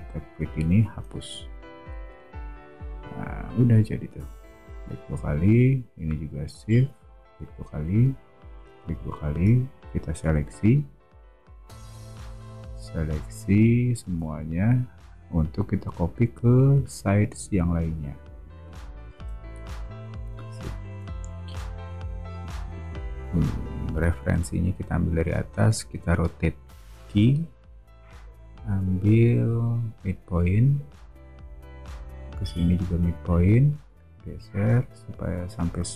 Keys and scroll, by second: 1.2 BackSpace, 14.2 o, 19.1 space, 22.7 o, 27.0 q.